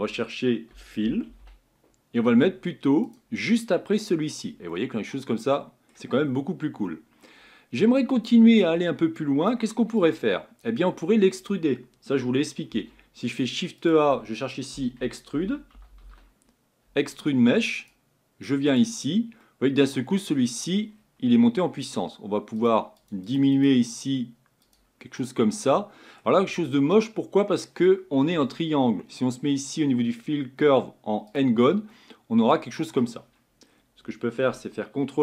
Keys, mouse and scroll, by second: 3.1 l, 4.7-6.2 middle drag, 6.2-10.1 scroll down 4, 19.5-22.6 middle drag, 22.6-25.2 drag, 25.2-31.3 middle drag, 31.3 click, 32.0-33.3 middle drag, 33.3-35.2 scroll down 3.